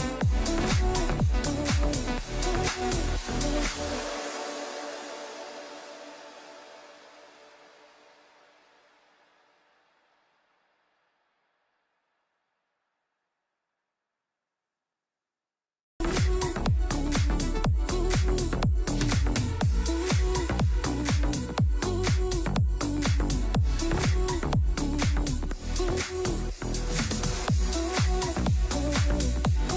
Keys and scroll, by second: 2.0 e, 2.8 Escape, 3.0 F2, 6.0 shift+Page_Down, 11.4 F3, 19.2 space, 20.0 shift+Page_Down, 23.1 c, 23.2 e, 23.8 Escape, 24.1 F2, 25.6 Escape.